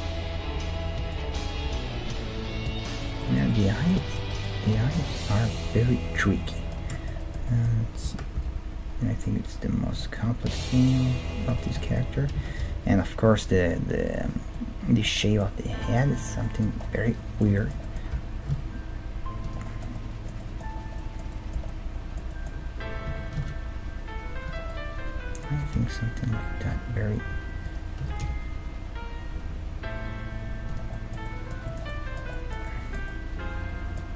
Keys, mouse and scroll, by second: 1.6 g, 3.2 middle click, 5.5-9.5 middle drag, 8.1 g, 10.2-13.6 middle drag, 10.8 g, 12.4 g, 14.5-16.9 middle drag, 15.7 g, 18.1 r, 20.0-24.2 middle drag, 23.1 r, 24.7-26.7 middle drag, 25.5 g, 28.0 g, 30.9-34.1 middle drag.